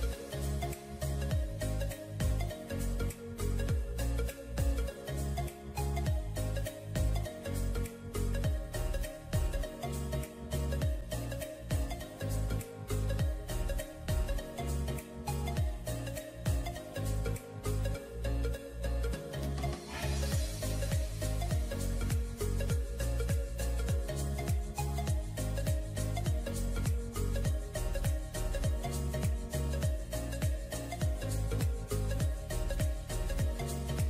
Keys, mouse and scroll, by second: 0.2 double click, 2.9 double click, 5.1 ], 5.3 ], 5.4 ], 7.7 typing, 10.7 double click, 12.2 typing, 15.1-15.4 typing, 18.4 typing, 19.7 double click, 20.3 ], 23.4-24.1 typing, 30.6-31.8 typing.